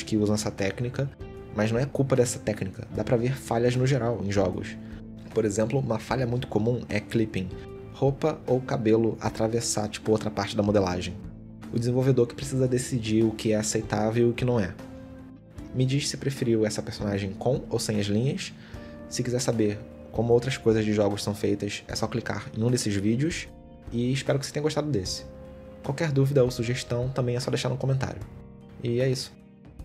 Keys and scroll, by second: 13.0 Tab, 13.4 alt+s, 13.9 Tab, 14.5 Tab, 14.8 alt+s, 16.1 s, 17.5 Tab.